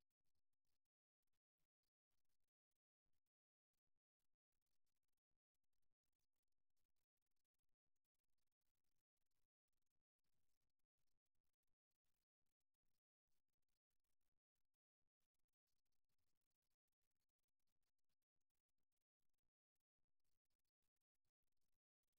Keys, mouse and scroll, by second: 0.4 click, 1.8 click, 1.8-3.6 middle drag, 3.4 KP_3, 5.2 g, 20.7-22.1 right drag.